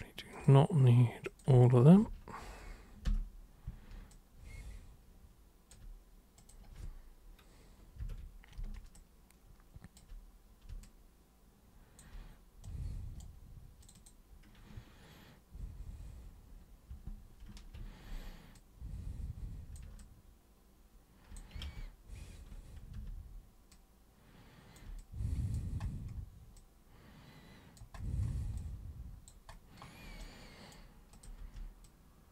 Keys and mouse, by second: 0.3 ctrl+shift+super+click, 1.3 ctrl+shift+super+click, 4.1-5.7 alt+super+drag, 6.4 super+click, 9.0-10.0 alt+super+drag, 10.8-12.0 alt+super+drag, 12.7 super+right click, 13.8 super+click, 17.5 ctrl+super+e, 18.6-19.8 super+drag, 20.0-21.4 alt+super+drag, 21.7 ctrl+super+z, 23.0 super+r, 23.7-24.8 super+drag, 25.0-25.6 alt+super+drag, 26.6-27.8 alt+super+drag, 28.6 alt+super+click, 30.2 super+right click, 31.2 super+click, 31.4 super+w, 31.9 super+click.